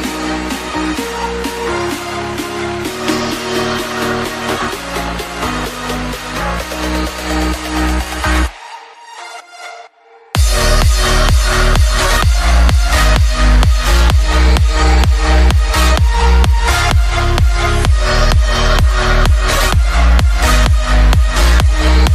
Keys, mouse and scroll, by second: 0.8 r, 18.4 shift+z.